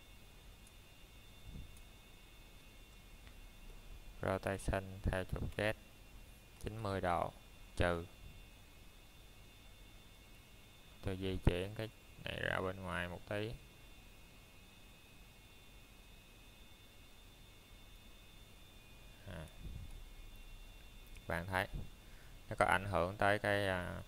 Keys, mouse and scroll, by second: 1.1 r, 3.9 z, 8.7-9.5 typing, 12.1 click, 12.6-13.1 scroll down 1, 13.1 middle click, 13.5 shift+middle click, 13.8 scroll up 1, 15.6 -, 16.3 middle click, 16.7 shift+middle click, 17.2-17.6 scroll up 1, 17.7 shift+middle click, 20.5 r, 23.0-23.8 typing.